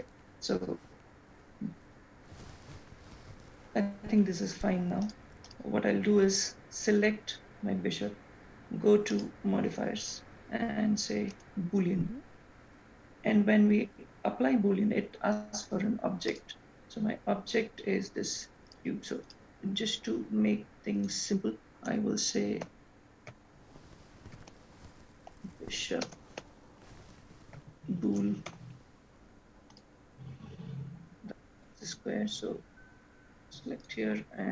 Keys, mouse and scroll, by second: 5.2 click, 5.8 click, 9.3 click, 10.2 click, 16.5 click, 19.5 click, 21.2 click, 21.5 click, 27.9 shift+o, 29.8 click, 31.2-32.9 scroll down 4, 32.9 click, 34.0 click.